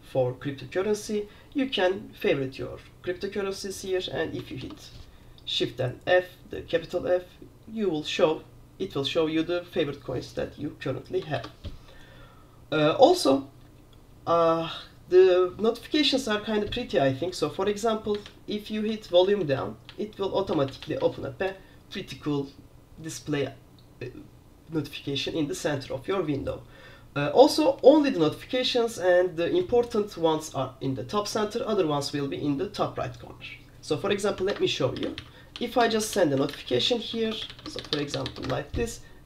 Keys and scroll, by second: 4.7 f, 11.5 super+q, 34.6 super+Return, 34.8-38.7 typing.